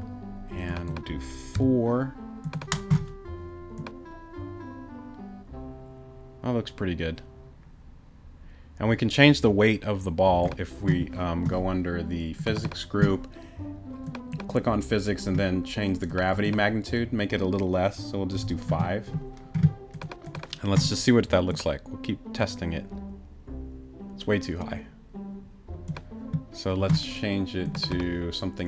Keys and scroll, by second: 1.5 4, 18.3 5.